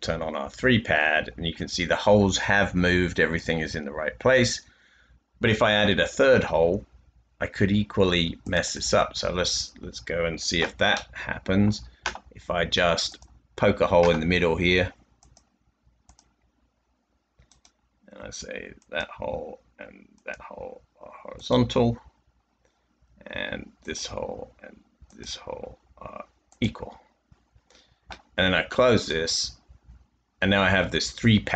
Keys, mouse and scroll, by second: 2.1 middle click, 2.3-3.0 typing, 5.0 typing, 11.2 middle click, 13.7 typing, 29.4-30.1 typing.